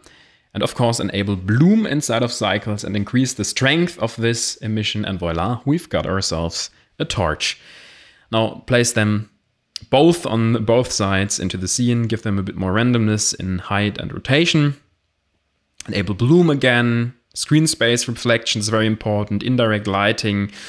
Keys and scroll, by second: 5.1 a.